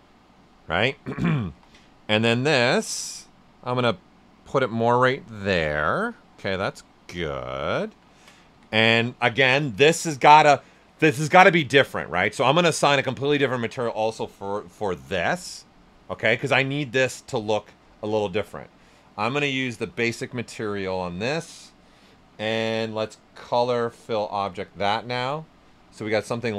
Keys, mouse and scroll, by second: 1.5 w, 1.9 ctrl+right click, 2.8-5.3 drag, 5.3 ctrl+right click, 5.6 right click, 6.8 ctrl+right click, 7.3 right click, 7.8 alt+right click, 8.0 ctrl+right click, 8.5 q, 14.0 click, 19.5 click, 23.4 click, 25.6-26.5 right drag.